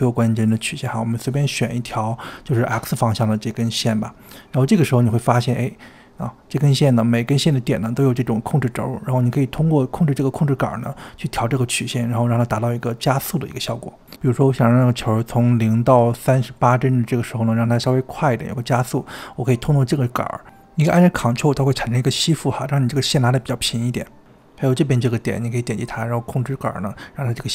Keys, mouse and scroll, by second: 0.8-3.1 scroll up 3, 3.1 click, 4.9 click, 6.0-9.8 scroll down 10, 12.6-14.3 drag, 14.4 space, 14.7 space, 15.2 click, 15.7 ctrl+z, 15.8 click, 16.4 click, 23.9 click, 25.0 click.